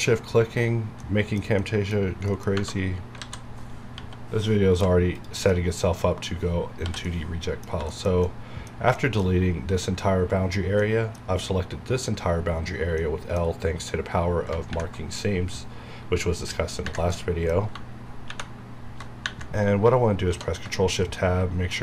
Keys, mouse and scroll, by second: 2.5 Tab, 3.2 alt+a, 3.8-5.1 typing, 5.1 click, 5.5-6.8 middle drag, 6.8 l, 7.0-13.5 middle drag, 13.5 scroll up 1, 17.1 middle click, 18.3 ctrl+shift+~, 20.3 shift+Tab, 21.7 middle click.